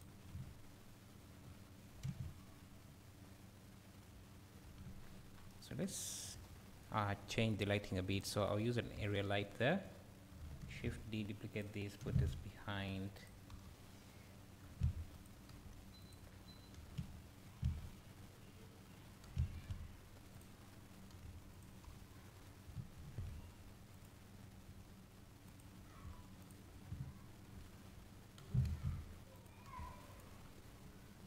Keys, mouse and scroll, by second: 0.3-0.9 drag, 0.3 `, 2.1 click, 4.9-6.0 drag, 4.9-6.0 scroll down 2, 6.2 click, 8.2 click, 9.4-10.2 scroll up 2, 10.2-10.7 scroll down 1, 10.7 shift+d, 12.0 r, 13.3 click, 13.5 KP_7, 14.7 r, 15.2 click, 15.5 g, 16.1 click, 19.3 r, 20.5 click, 21.1 g, 21.6 click, 21.9 KP_7, 23.0 shift+d, 24.0 click, 24.7 r, 25.6 click, 25.9 g, 26.5 click, 28.4 r, 29.4 click, 29.7 g, 30.2 click, 30.4-31.2 scroll up 2.